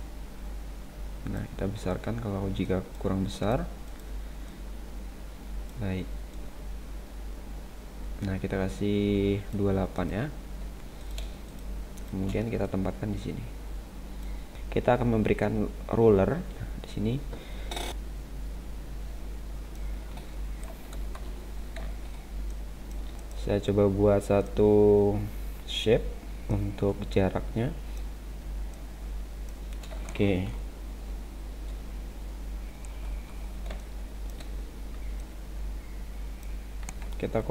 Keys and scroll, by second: 21.1 ctrl+=, 21.8 space, 32.9 ctrl+-, 33.7 space.